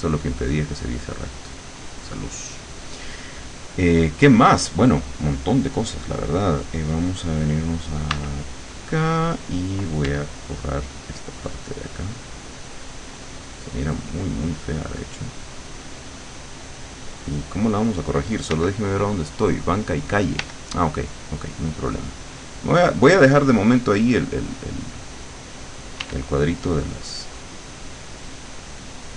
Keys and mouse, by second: 8.2 w, 10.1 e, 10.9 click, 12.2-18.3 drag, 18.6 l, 20.4 l, 21.9-25.4 drag, 26.0 w.